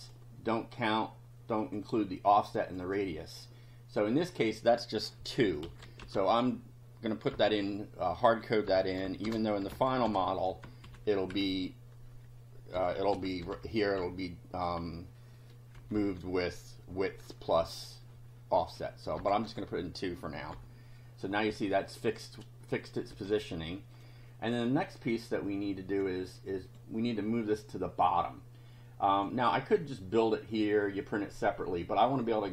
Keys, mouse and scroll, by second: 1.6 click, 2.6 click, 4.1 click, 5.2-10.6 typing, 10.9 Left, 12.5-14.5 typing, 15.8 Left, 19.2 BackSpace, 19.5 2, 20.5 F5, 22.1 click, 22.9 click, 23.1 space, 24.0 click, 24.6-26.2 drag, 26.4 click, 28.2-29.4 drag, 29.8 click.